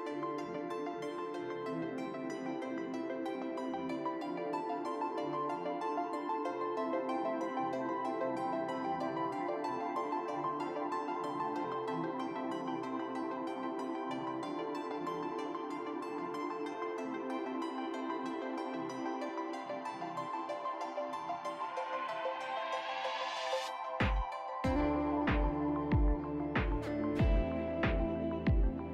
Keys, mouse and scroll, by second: 0.3-0.8 scroll down 2, 0.4 ctrl+y, 0.8-1.2 scroll up 2, 0.9 drag, 1.4 alt+click, 2.4 click, 3.6 alt+click, 4.9 ctrl+y, 5.3 scroll down 1, 5.4 scroll up 1, 5.4 ctrl+y, 5.6 alt+scroll down 1, 6.0 ctrl+y, 6.0 click, 6.4 ctrl+y, 6.4 click, 7.4 ctrl+y, 7.4 double click, 7.5 alt+scroll up 1, 8.5 shift+click, 8.8 double click, 9.6 ctrl+y, 9.9 ctrl+z, 10.0 ctrl+y, 11.1 shift+click, 11.4 double click, 12.0 ctrl+y, 12.6 shift+click, 12.7 shift+double click, 14.3 scroll down 1, 14.8 shift+click, 16.3 shift+click, 18.5 shift+click, 18.8 a, 20.2 double click, 20.5 ctrl+y, 20.6 ctrl+y, 21.0 shift+click, 23.0 shift+click, 23.9 ctrl+y, 24.8 shift+double click, 26.5 shift+click, 27.0 a, 27.8 ctrl+z, 28.6 ctrl+y, 28.8 ctrl+y.